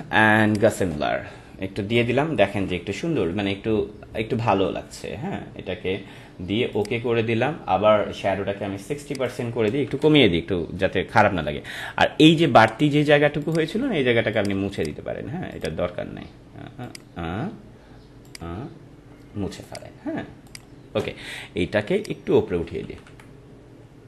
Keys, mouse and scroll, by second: 2.2 ctrl+=, 6.7 click, 9.1 click, 13.4 click, 22.5 Up.